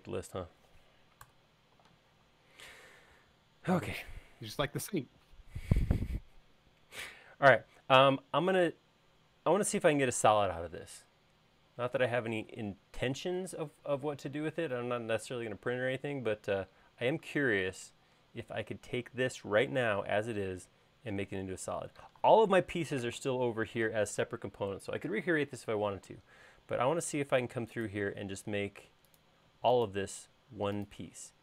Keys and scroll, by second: 2.1 BackSpace.